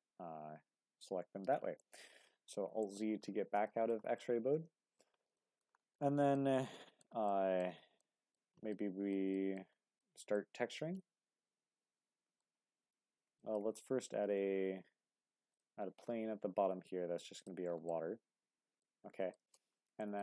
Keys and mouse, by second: 1.2 Tab, 1.8-2.5 middle drag, 2.8 alt+z, 3.7 shift+middle drag, 4.2-5.0 middle drag, 5.4 shift+middle drag, 5.9-6.3 middle drag, 6.8-7.1 shift+middle drag, 7.3-7.6 middle drag, 8.0-8.4 shift+middle drag, 8.7 drag, 8.7-9.2 middle drag, 9.4 shift+middle drag, 10.0-10.4 middle drag, 11.0-12.4 middle drag, 13.4 shift+click, 14.1 shift+a, 16.4 s, 17.4 click, 17.9-18.8 middle drag, 19.3 shift+middle click, 20.0 shift+middle drag.